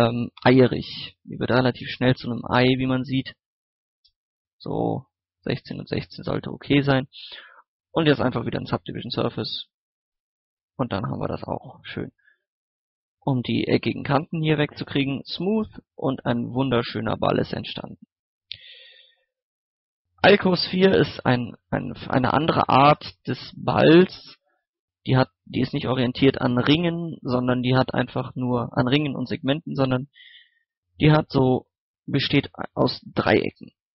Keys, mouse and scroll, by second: 1.3 KP_1, 1.4 KP_6, 3.3 click, 3.8 KP_6, 4.8 scroll down 1, 4.9 scroll up 1, 5.3 middle click, 7.1 click, 8.3-9.5 middle drag, 9.5 click, 15.8-18.1 middle drag, 18.1 x, 18.3 click, 18.7 shift+a, 20.2 click, 20.7 middle click, 21.7 scroll up 1, 22.1 scroll down 1, 22.4 middle click, 22.9 scroll down 1, 24.5 scroll up 1, 24.8 Tab, 27.1 middle click, 30.8 right click, 31.9 shift+right click, 32.6 middle click, 33.2 Tab.